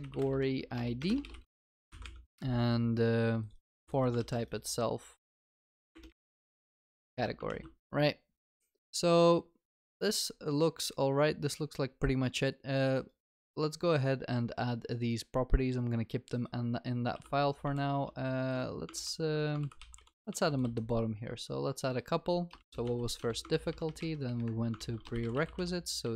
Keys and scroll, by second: 1.3 ctrl+w, 1.7 ctrl+s, 2.3 ctrl+v, 3.7 ctrl+c, 4.2 ctrl+v, 6.6 ctrl+v, 17.1 ctrl+c, 17.4 ctrl+v, 18.9 ctrl+c, 19.8 ctrl+v, 23.2 Return, 23.6 ctrl+s, 24.8 ctrl+w.